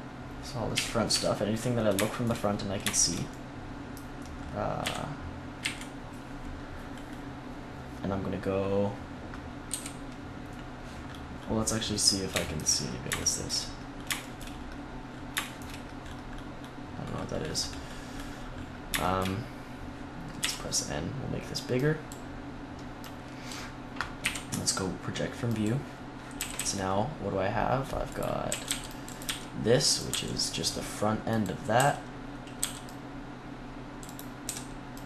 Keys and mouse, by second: 0.6 KP_1, 1.0 z, 4.7 KP_3, 5.5 KP_1, 9.6 u, 20.3 n, 21.9-25.5 drag, 24.1 u, 26.3 a, 26.4 a, 28.0-29.8 drag, 28.4 a, 28.6 c, 29.1 s, 30.0 g, 31.7 a, 32.5 c, 34.0-35.0 drag, 34.3 s, 34.9 g.